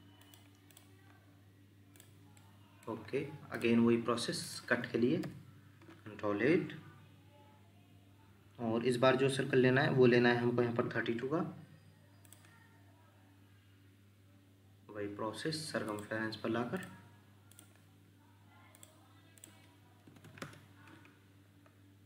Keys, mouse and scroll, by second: 0.7 double click, 2.3 middle click, 6.3 ctrl+8, 20.1 3, 20.4 Return, 20.4 2.